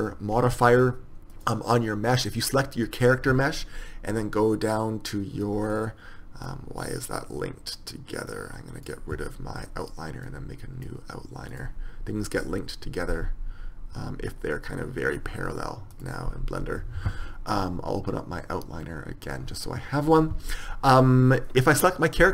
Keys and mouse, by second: 1.5-5.9 right drag, 5.9 click.